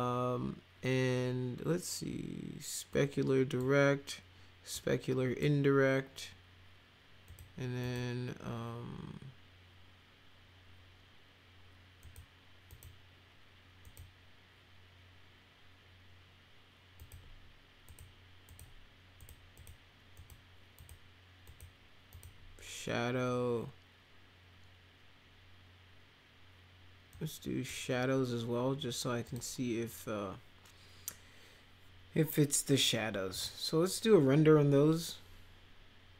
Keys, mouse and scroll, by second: 2.9 click, 4.7 click, 7.3 click, 7.8 click, 12.0 click, 12.7 click, 13.8 click, 17.0 click, 17.9 click, 18.5 click, 19.2 click, 19.6 click, 20.2 click, 20.8 click, 21.5 click, 22.1 click, 27.1 click, 29.3 click, 33.3 click.